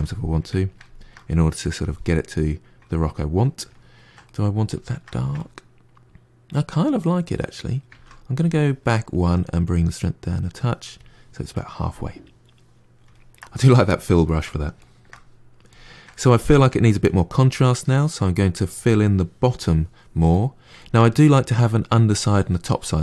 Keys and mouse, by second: 1.7 click, 2.0-7.3 middle drag, 7.8 ctrl+z, 8.4-9.5 shift+middle drag, 9.5-11.4 drag, 11.4-13.4 middle drag, 14.2-23.0 middle drag.